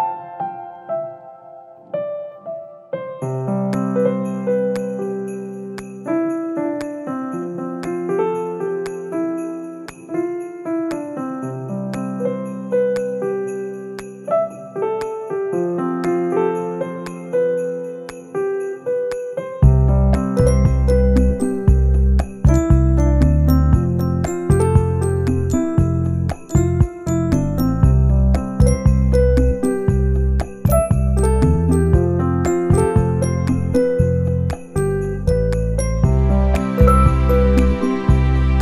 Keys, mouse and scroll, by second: 0.0 scroll down 1, 0.4 shift+middle click, 0.7 middle click, 2.0 click, 3.2 click, 3.7 shift+click, 4.5 shift+click, 4.5 shift+middle click, 4.9 shift+click, 6.5 middle click, 7.0 shift+click, 7.6 middle click, 7.9 shift+middle click, 8.1 shift+click, 8.9 ctrl+l, 10.0 middle click, 10.6 click, 10.9 shift+middle click, 11.0 middle click, 12.1 click, 12.4 Tab, 13.4 a, 13.9 u, 15.9 r, 18.0 click, 19.2 g, 22.4 middle click, 25.6 click, 26.0 middle click, 26.6 click, 26.9 Tab, 28.2 click, 29.0 u, 32.8 r, 34.5 s, 35.7 g.